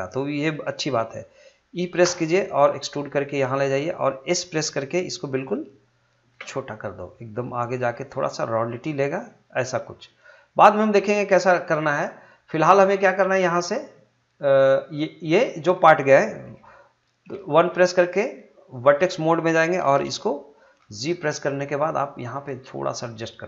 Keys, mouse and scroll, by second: 2.0 e, 3.7 click, 9.6 click, 18.2-20.8 drag, 20.8 g.